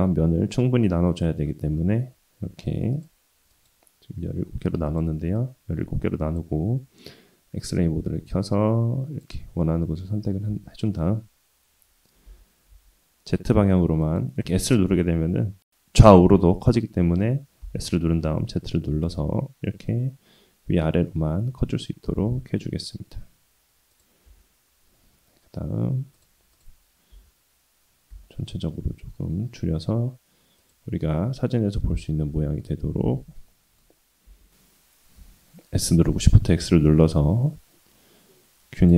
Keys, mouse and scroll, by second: 0.1-0.6 scroll up 2, 0.7 ctrl+r, 4.8 click, 5.3-6.4 drag, 7.6 click, 8.3 click, 10.6 s, 14.4 s, 17.6 s, 24.2 Tab, 26.1 click, 26.5 click, 27.1 s, 31.1-32.6 middle drag, 33.0 ctrl+z, 33.4 middle click, 34.2 s.